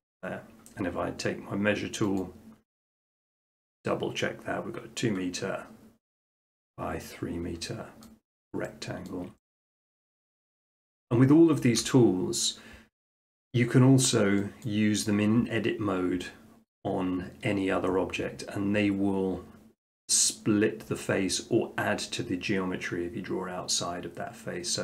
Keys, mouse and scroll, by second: 0.0 click, 2.2 click, 8.0 middle click, 9.1 shift+middle click, 10.2 middle click, 10.6 right click, 14.6 click.